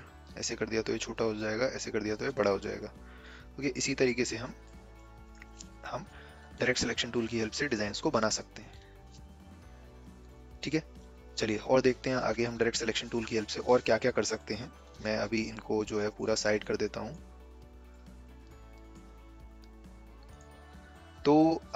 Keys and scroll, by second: 14.8 v.